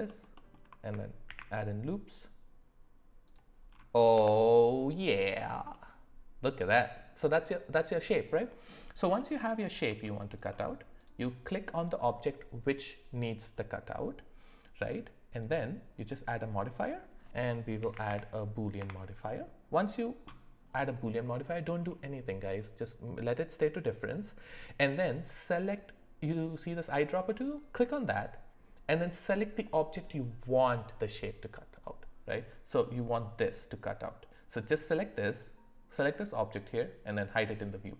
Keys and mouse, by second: 1.3 ctrl+b, 4.1 Tab, 5.7-7.0 middle drag, 9.2 middle click, 9.6 shift+middle drag, 10.0 middle click, 11.0 click, 15.3 click, 16.0-18.8 drag, 18.0 o, 21.9 middle click, 35.3 click, 37.1 click.